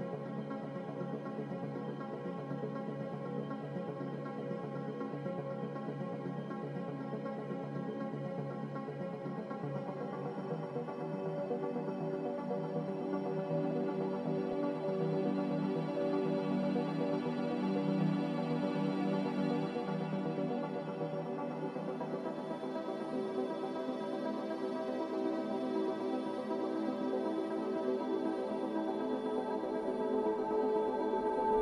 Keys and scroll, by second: 9.1 z, 18.1 s, 19.3 z, 21.2 x, 23.4 z, 24.8 x, 29.1 3, 29.4 Return, 31.3 3.